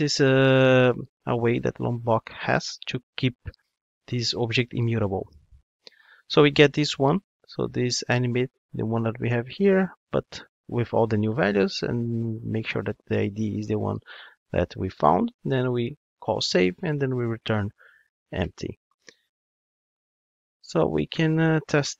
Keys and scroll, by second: 2.8 ctrl+Tab.